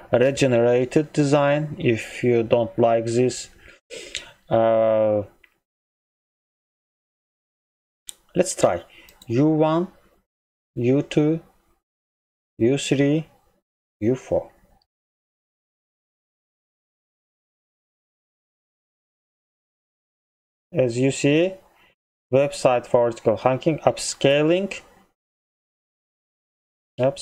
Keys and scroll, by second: 26.8 ctrl+m.